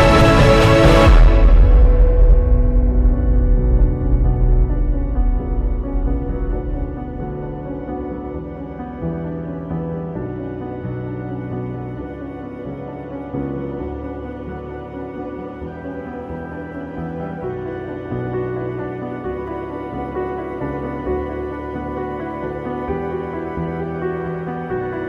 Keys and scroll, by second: 7.3 b, 10.9 ctrl+i, 12.1 [, 13.4 space, 13.8 ], 14.4 space, 15.1 space, 17.5 space, 17.8 ctrl+i, 19.4 ], 20.0 [, 22.2 b, 22.7 x, 23.3 ctrl+z, 23.7 ], 24.7 ], 24.8 ctrl+z.